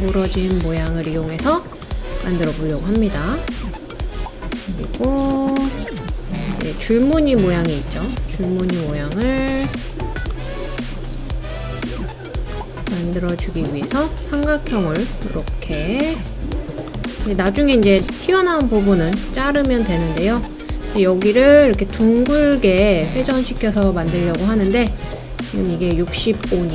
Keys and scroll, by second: 22.3-23.7 typing.